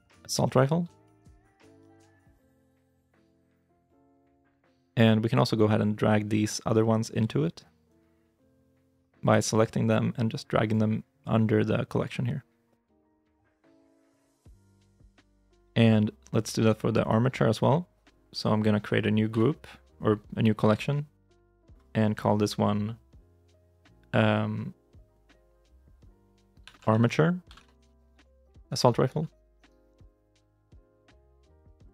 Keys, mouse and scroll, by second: 0.0 u, 1.3-2.2 typing, 2.5 Return, 16.8 right click, 19.1 m, 26.5-30.3 typing, 30.6 Return.